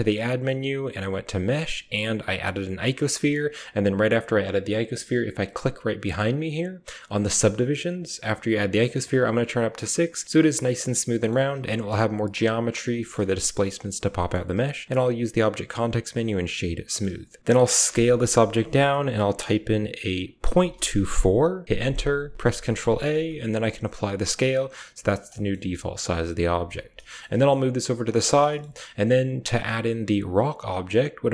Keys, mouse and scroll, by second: 8.5 click, 8.9 click, 10.5-11.3 middle drag, 11.7 Tab, 12.9 shift+middle click, 14.1 right drag, 14.5 w, 16.8 click, 17.4 ctrl+z, 17.7 s, 23.0 ctrl+a, 25.2 shift+middle click, 26.9 shift+middle click, 27.1 g, 28.1-28.5 shift+middle drag.